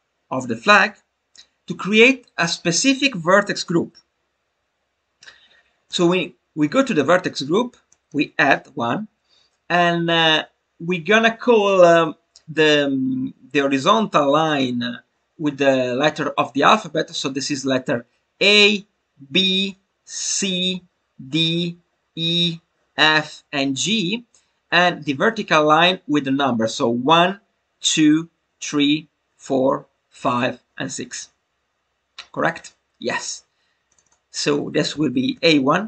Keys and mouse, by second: 5.8-33.9 drag, 34.0-35.8 drag.